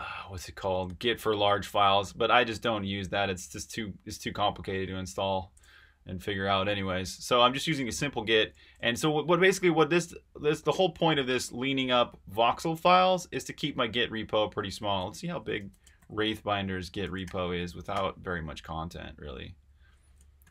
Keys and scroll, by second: 15.2-17.9 typing, 20.4 super+i.